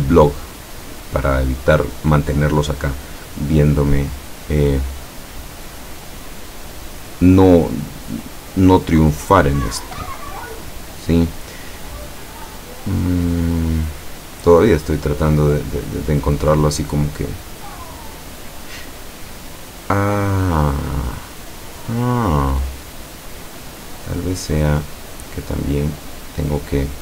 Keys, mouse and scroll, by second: 15.0-16.0 middle drag, 20.6-21.5 middle drag, 24.3-25.8 drag.